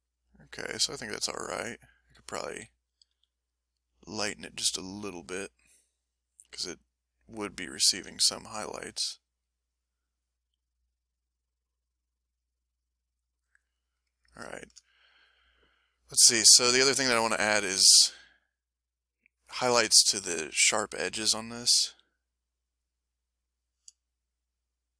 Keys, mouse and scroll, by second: 1.1 ctrl+middle click, 2.4 ctrl+s, 3.1 f, 3.4 ctrl+click, 4.0 ctrl+click, 5.0-6.3 ctrl+drag, 6.5 click, 7.1 click, 7.9 s, 8.5 click, 8.9 click, 9.4-12.5 drag, 13.1 click, 13.8 ctrl+middle click, 14.5 ctrl+shift+scroll up 1, 14.5 ctrl+shift+middle click, 16.7 s, 18.3-19.3 middle drag, 19.7 middle click, 20.2 shift+middle click, 20.7 shift+click, 21.9 shift+f, 22.7 shift+click, 23.1 shift+click, 24.3-24.9 shift+drag.